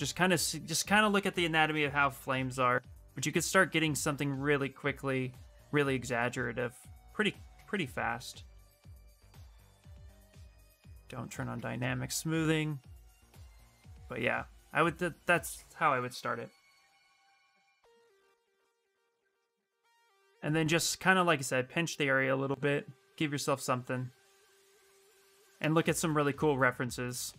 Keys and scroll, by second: 5.9 space, 6.9 d, 7.3 d, 8.3 s, 9.6 s, 10.6 shift+d, 26.2 s.